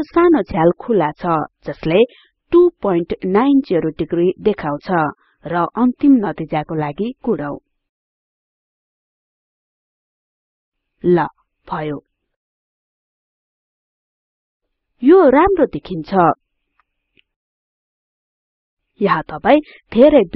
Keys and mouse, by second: 2.9-4.4 drag, 6.9 click.